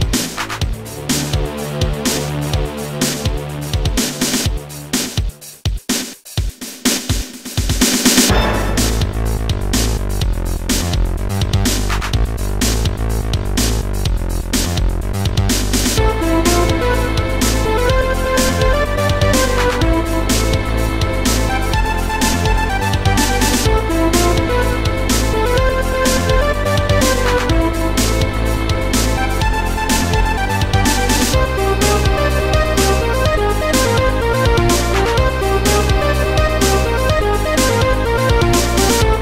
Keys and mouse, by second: 2.0 click, 5.8 click, 6.7 click, 8.1 click, 9.9 click, 12.7 click, 14.0 Delete, 16.6 click, 17.3 click, 20.1 click, 21.1 click, 22.0 click, 24.4 click, 25.2 click, 27.2 click, 31.2 click, 32.6 click, 36.8 click, 37.6 shift+click, 38.4 click.